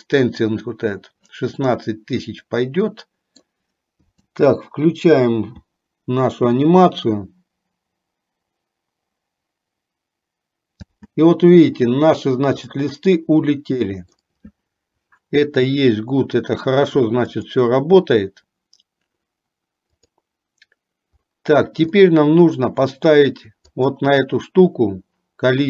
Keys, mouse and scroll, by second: 1.7-3.7 middle drag, 4.5 space, 11.1 space, 12.8-14.5 middle drag, 17.5 click, 20.2 click, 22.2-23.2 middle drag, 23.8 click.